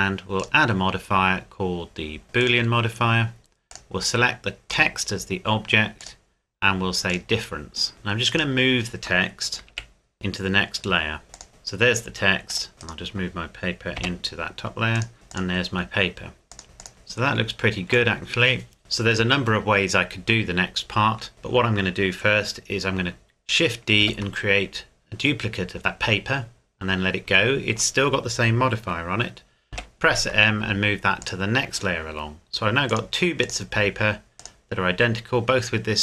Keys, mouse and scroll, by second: 0.4 click, 2.4 click, 8.3 right click, 9.7 m, 11.3 click, 12.5 click, 12.8 right click, 14.0 m, 14.9 click, 16.9 scroll down 1, 18.1 middle click, 22.7 shift+Num_Lock, 22.7-24.0 scroll down 1, 24.0 shift+d, 27.3 Escape, 29.7 m, 31.2 click.